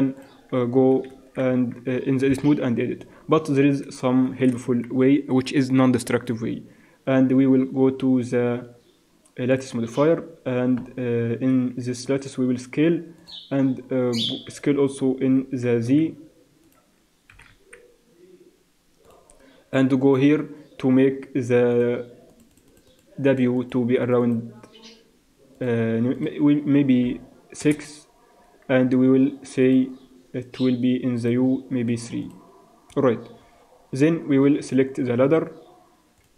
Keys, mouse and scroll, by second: 1.1 ctrl+z, 1.5 Tab, 2.3 KP_1, 4.3 shift+c, 6.9 shift+a, 12.0 s, 15.3 g, 17.3 s, 20.0-28.0 drag, 29.7-36.3 drag, 36.2-36.3 right drag.